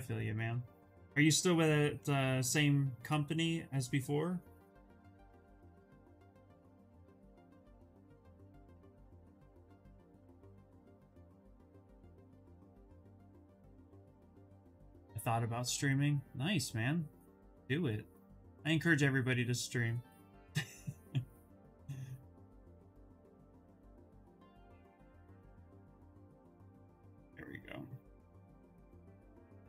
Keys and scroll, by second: 8.3 s, 29.4 s.